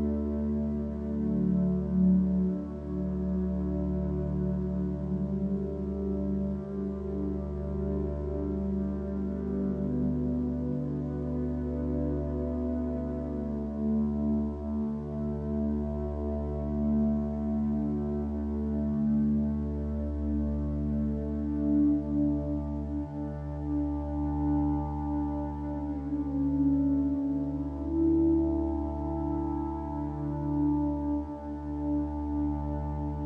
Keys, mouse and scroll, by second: 16.8 click.